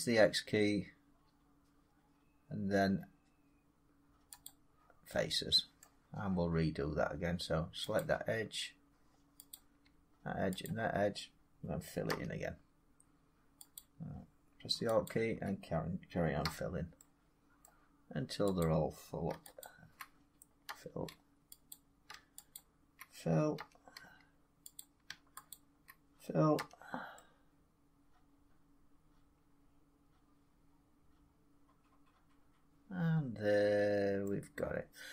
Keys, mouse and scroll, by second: 2.5 scroll down 2, 4.3-5.7 drag, 5.7 middle click, 7.8 click, 9.5 click, 10.5 shift+click, 11.9 f, 13.6 click, 14.9 alt+click, 16.3 f, 17.5 middle click, 17.8 scroll, 18.5 click, 19.5 alt+click, 20.6 f, 21.6 click, 22.4 alt+click, 23.4 f, 24.6 click, 25.4 alt+click, 26.4 f, 34.1 middle drag.